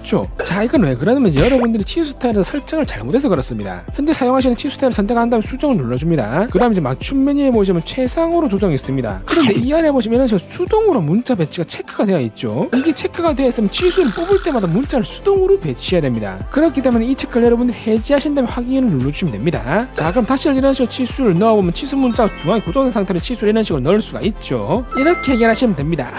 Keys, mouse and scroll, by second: 0.6-1.5 typing, 6.2 click, 7.2 click, 18.2 click, 19.3 click, 20.3 click, 21.5 click.